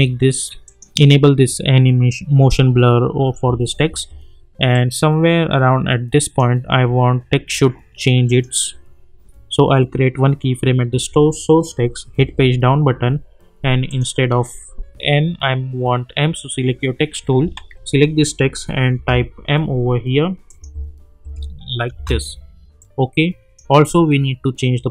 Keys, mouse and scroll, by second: 0.6 click, 3.6 space, 4.7-8.2 drag, 12.1 Page_Down, 13.9 click, 17.4 click, 17.5 ctrl+a, 18.9 shift+m, 20.5 click, 20.6 space, 22.8-24.9 drag.